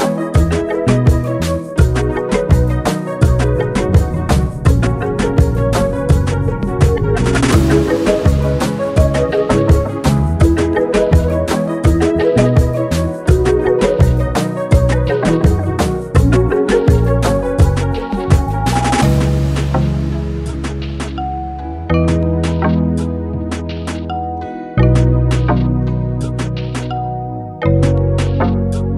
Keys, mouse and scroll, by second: 6.1-7.3 middle drag, 7.3 click, 8.7-10.4 drag, 10.4 scroll up 1, 10.7-11.2 middle drag, 11.2 scroll down 1, 11.4-12.4 middle drag, 12.4-12.9 scroll up 2, 13.7-15.0 drag, 15.0 alt+middle click, 15.6 g, 17.7-18.3 middle drag, 18.3-18.6 scroll down 1, 18.6 click, 19.3-19.8 scroll down 1, 19.8-21.4 middle drag, 22.0 alt+middle click, 22.3-22.8 scroll up 1, 22.8 click, 23.3-24.0 scroll down 1, 24.0 ctrl+r, 25.2 Tab, 25.9 ctrl+r.